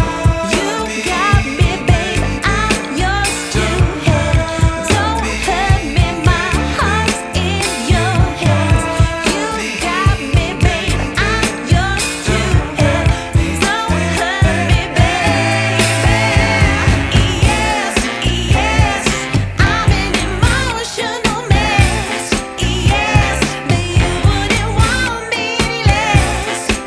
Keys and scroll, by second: 3.4 Return, 3.9 Up.